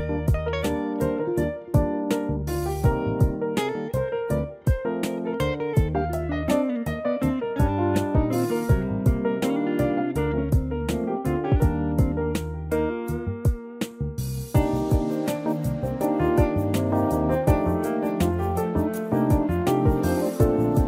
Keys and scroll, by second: 0.1 3, 0.6 -.